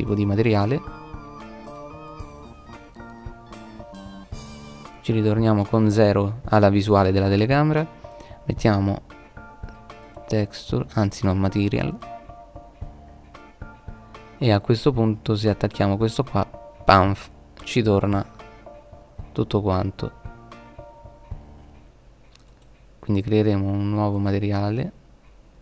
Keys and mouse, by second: 0.1 click, 0.8-2.3 drag, 2.3-2.7 middle drag, 3.9 KP_0, 6.5 click, 13.8-15.3 right drag, 15.3-17.4 drag.